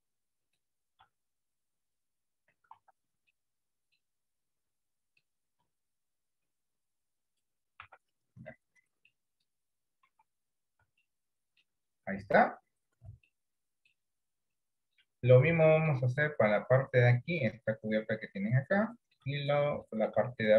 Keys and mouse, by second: 1.5 click, 2.9 ctrl+z, 3.4 middle click, 6.3-7.5 drag, 7.9 Tab, 8.6 middle click, 10.1 KP_3, 11.2 middle click, 13.4 shift+middle click, 14.5 shift+middle click, 15.6 shift+middle click, 19.0 shift+middle click, 20.0 shift+middle click.